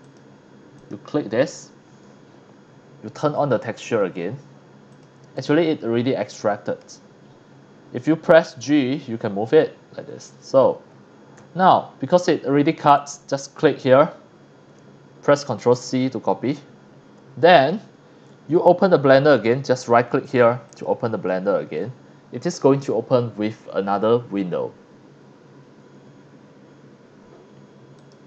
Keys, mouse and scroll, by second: 0.0 click, 0.8 click, 1.5 scroll up 1, 3.4 click, 4.0 click, 4.9 click, 5.3 click, 5.8 scroll down 1, 5.9 scroll up 1, 6.3-6.8 middle drag, 7.3-7.7 scroll up 2, 8.6 g, 9.4 click, 11.4 ctrl+a, 12.2 click, 13.0 click, 15.7 ctrl+c, 17.0 scroll up 1, 19.6 right click, 20.7 click, 21.4-22.7 middle drag, 28.0 click.